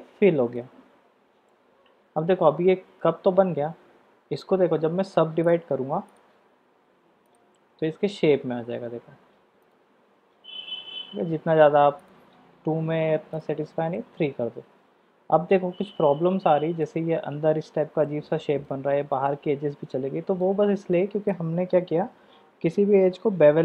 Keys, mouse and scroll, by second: 0.8 Tab, 1.5-3.9 drag, 3.9 middle click, 6.2-7.5 drag, 12.0 click, 13.3 click, 13.9-16.8 middle drag, 18.0-18.7 middle drag, 19.3-20.4 middle drag, 20.9-23.0 middle drag.